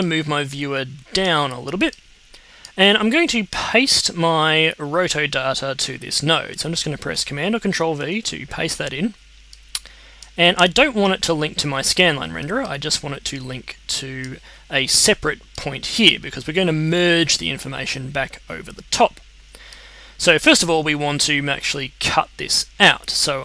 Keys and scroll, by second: 7.9 super+v.